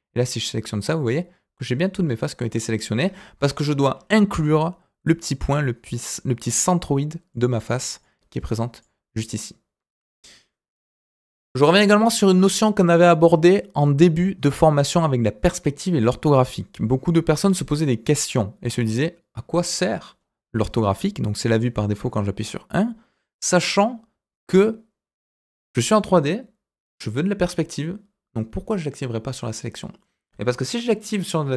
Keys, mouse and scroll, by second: 0.6-0.9 scroll down 2, 0.9-2.6 middle drag, 3.3 KP_1, 3.9-7.1 scroll up 2, 7.3 click, 8.0 click, 10.0-11.8 scroll down 2, 13.3-14.4 scroll up 2, 14.4-15.5 scroll up 2, 15.5-18.0 scroll down 2, 18.0 click, 22.0 KP_1.